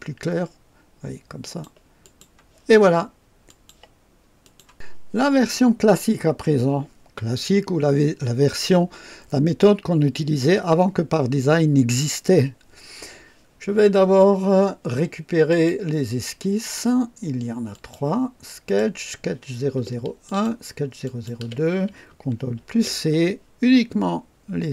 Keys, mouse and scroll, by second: 1.4 click, 2.0 click, 3.4 click, 4.4 click, 15.4 click, 16.5 click, 17.6 click, 18.6 click, 20.2 ctrl+click, 20.9 ctrl+click, 22.5 ctrl+c, 22.5 ctrl+c.